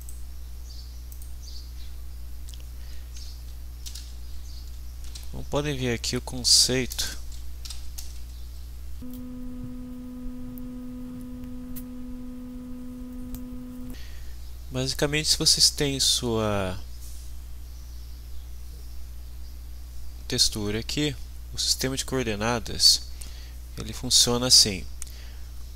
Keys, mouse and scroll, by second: 0.1 click, 1.1 click, 3.6-5.1 typing, 6.9 BackSpace, 7.6 u, 8.0 BackSpace, 8.1 y, 8.5 Down, 8.9 Right, 9.1 Return, 12.3 click, 13.7 s, 14.5 click, 15.3 click, 16.1 click, 16.7-18.2 drag, 18.5-22.6 drag, 23.9-25.7 drag.